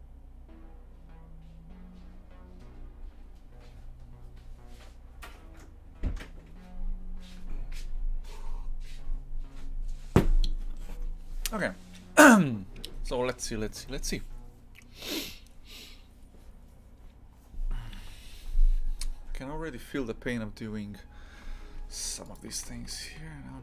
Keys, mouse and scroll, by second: 22.6 shift+f.